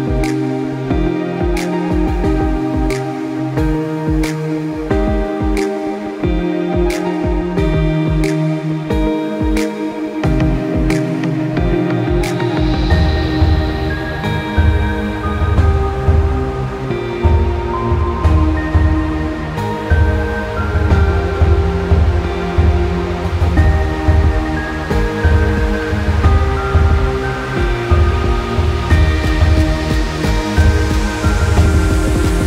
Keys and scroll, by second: 0.6 e, 1.7 Escape, 7.4 ctrl+shift+p, 19.2 Delete.